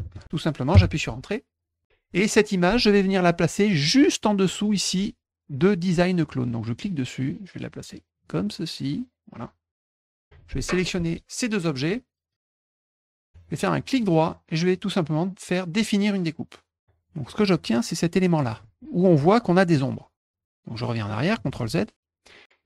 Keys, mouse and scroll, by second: 0.0-0.6 typing, 0.7 Return, 6.8-8.8 drag, 9.9 click, 12.3 click, 12.7 shift+click, 14.0 right click, 16.0 click, 17.3-18.4 drag, 21.5 ctrl+z.